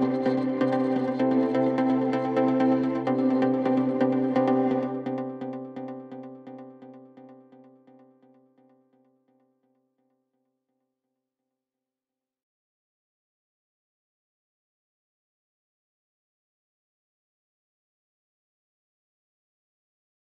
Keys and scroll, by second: 17.3-20.2 typing.